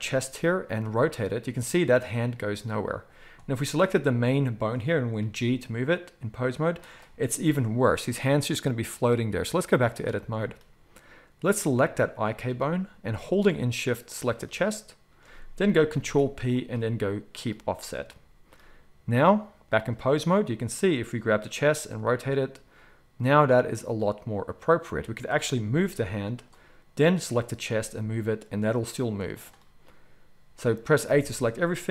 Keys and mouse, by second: 0.8 r, 3.8 click, 3.9-8.5 middle drag, 5.2 g, 8.5-11.5 drag, 11.5-19.2 shift+middle drag, 15.9 ctrl+p, 19.2-20.6 drag, 20.6-27.1 middle drag, 21.8 r, 25.6 g, 27.1-27.6 drag, 27.6-31.9 middle drag, 27.6 r, 31.0 a.